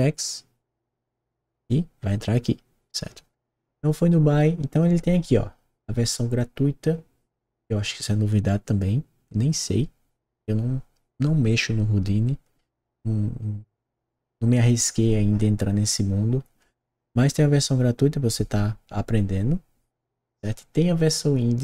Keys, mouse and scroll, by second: 21.5 click.